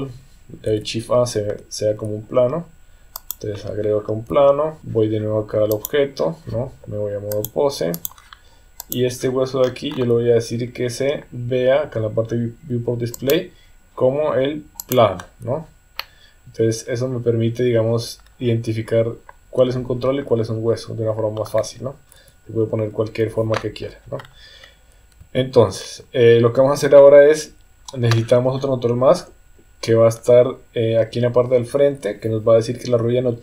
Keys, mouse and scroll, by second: 3.3 shift+a, 4.3 s, 4.8 ctrl+a, 5.8 click, 7.5 click, 8.8 click, 13.2-15.0 drag, 16.0-21.4 middle drag, 22.1 KP_1, 23.1 KP_3.